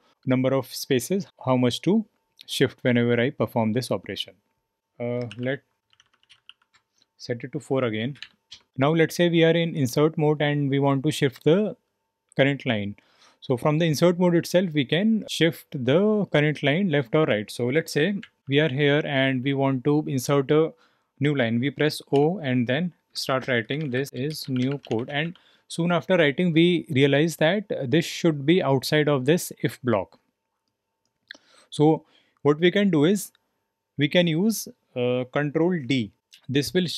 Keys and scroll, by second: 0.0-18.9 typing, 22.1-25.7 typing.